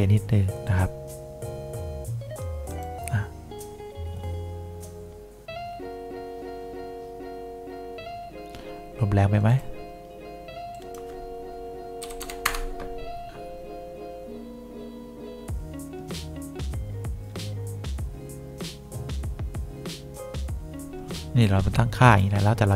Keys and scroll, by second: 12.1 2, 12.5 Return.